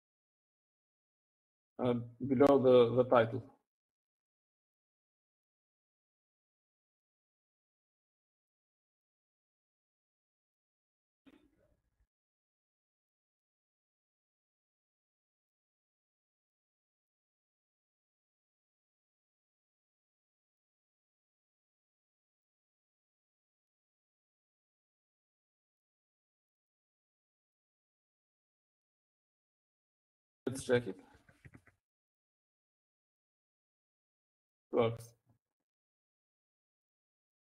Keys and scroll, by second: 2.8 Down, 4.3 Down, 7.4-8.1 typing, 8.6 Right, 9.3 Right, 10.4-11.6 typing, 12.4 Right, 12.6-12.9 Right, 12.9-14.6 typing, 15.9-16.6 typing, 19.5-24.9 typing, 26.8-27.3 typing, 29.7-30.4 typing, 32.0-33.4 typing, 34.6 typing.